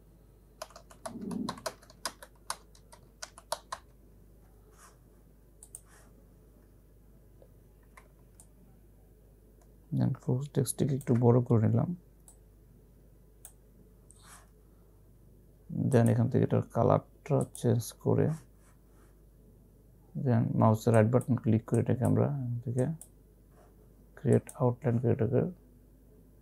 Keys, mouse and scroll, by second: 0.0-4.3 typing, 5.7 click, 8.3-9.0 typing, 8.5-16.1 alt+shift+drag, 21.7-22.4 typing, 21.8 right click, 24.2-25.0 typing, 24.5 click.